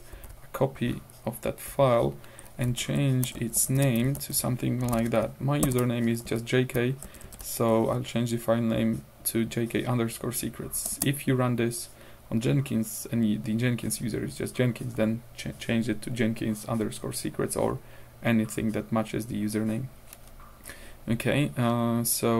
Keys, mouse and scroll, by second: 0.2 ctrl+v, 1.3 scroll down 2, 1.7 F2, 2.5 Right, 2.9 ctrl+shift+Left, 3.9-6.2 typing, 4.2 ctrl+shift+Left, 6.3 Left, 7.1 shift+Left, 7.7 shift+Right, 11.0 Return.